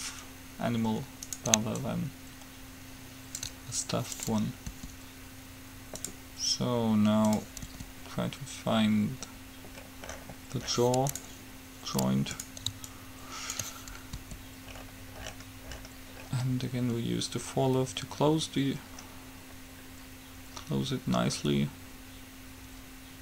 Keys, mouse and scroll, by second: 1.4-3.2 right drag, 2.0-3.9 ctrl+drag, 4.4-6.0 ctrl+drag, 5.0 r, 7.5-9.4 drag, 8.1 r, 12.6-14.4 right drag, 13.1-14.6 drag, 14.4 r.